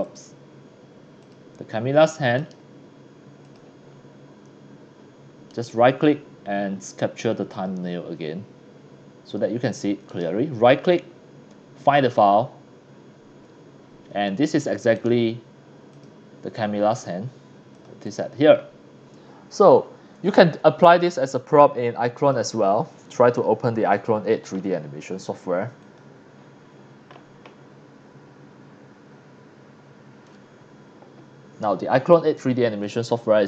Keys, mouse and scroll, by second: 1.2 click, 2.4 right click, 3.4 click, 3.9 scroll up 1, 4.3 scroll down 1, 5.5 right click, 7.5 click, 10.1 right click, 11.8 click, 15.0 right click, 15.9 click, 16.9 click, 17.7 click, 17.9 scroll down 1, 18.0 click, 22.2 click, 25.8 click, 32.8 click.